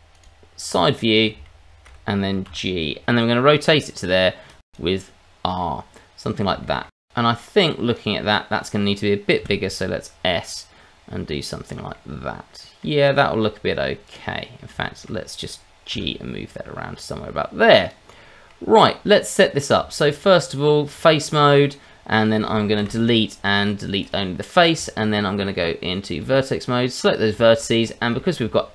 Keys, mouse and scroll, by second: 0.1 click, 0.8-1.6 scroll down 3, 1.4 shift+middle click, 2.4 g, 3.4 click, 3.8 r, 4.7 click, 5.6 middle click, 6.6 shift+middle click, 7.0 scroll down 1, 7.9 click, 9.4 s, 11.6 click, 11.9 middle click, 13.1-14.0 scroll down 1, 14.0 click, 14.5 scroll down 1, 14.8 shift+middle click, 15.9 g, 17.8 click, 18.1 middle click, 18.8-19.7 scroll up 2, 19.8 Tab, 21.3 click, 22.2-22.8 scroll up 1, 22.8 Delete, 24.8 Tab, 26.6 click, 27.4 shift+middle click, 27.8 scroll up 1, 28.2 shift+middle click.